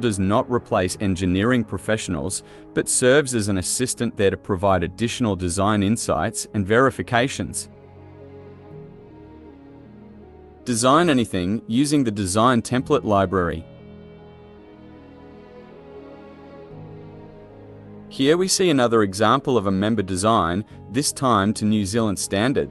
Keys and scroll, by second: 16.6-22.7 typing, 17.7 Tab, 19.3 Tab, 21.7 Tab.